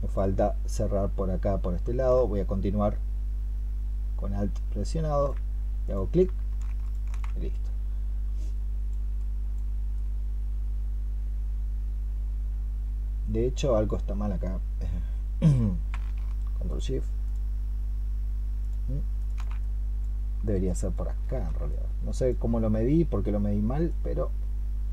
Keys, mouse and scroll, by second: 2.0 alt+click, 6.7 ctrl+shift+click, 16.5 ctrl+shift+click, 18.5 ctrl+shift+click, 23.7 alt+click.